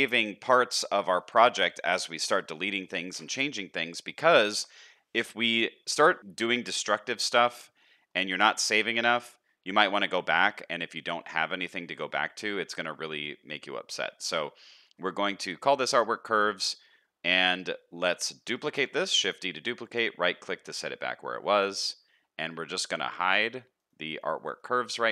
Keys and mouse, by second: 6.7 middle click, 8.1 middle click, 9.9 middle click, 11.2 middle click, 12.2 middle drag, 13.9 middle click, 16.7 middle click, 18.7 shift+d.